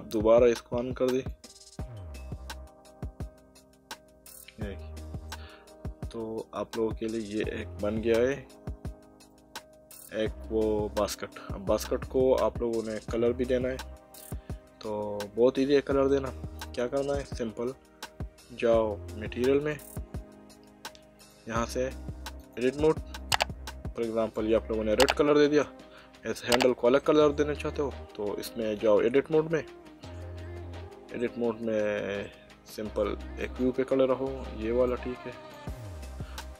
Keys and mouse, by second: 1.1 click, 4.6 middle click, 6.0 Tab, 9.3 middle click, 19.7 click, 21.2 click, 22.4 click, 25.1 middle click, 26.4 middle click, 27.8 Tab, 30.4 middle click, 31.8 middle click, 33.4 click, 34.9 click.